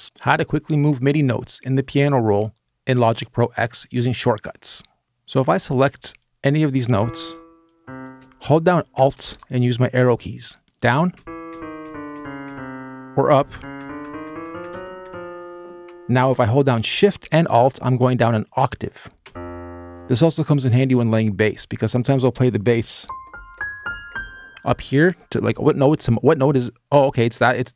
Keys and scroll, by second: 10.9 alt+Page_Down, 11.3 alt+Page_Down, 11.9 alt+Page_Down, 13.3 alt+Page_Up, 13.6 alt+Page_Up, 14.0 alt+Page_Up, 14.8 alt+Page_Down, 20.0 alt+shift+space.